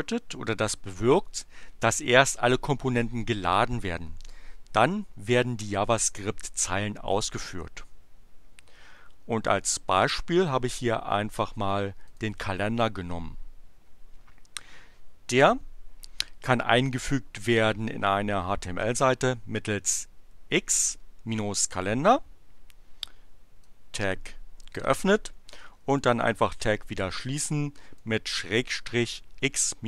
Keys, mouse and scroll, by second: 12.0 click, 23.5-24.8 drag, 25.8 click, 26.5-28.2 drag.